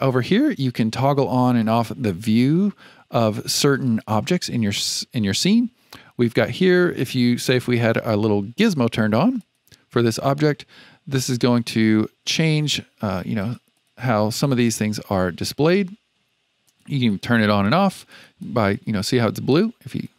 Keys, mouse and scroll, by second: 0.7 click, 1.5-4.6 drag, 6.2-9.5 drag, 11.5-14.6 drag, 16.6 click, 17.0 click, 17.3 click, 17.6 click, 18.1 click, 18.4 click, 18.7 click, 19.5 click, 19.9 click.